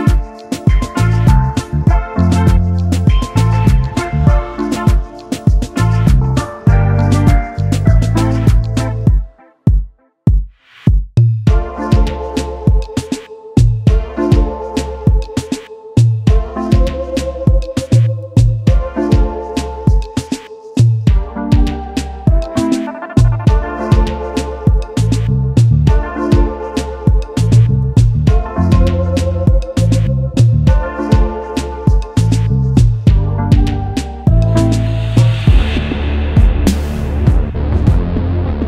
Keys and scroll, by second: 0.6 space, 1.9 space, 2.7 s, 4.1 ctrl+s, 8.0 s, 15.6 shift+r, 36.1 space, 36.1 space.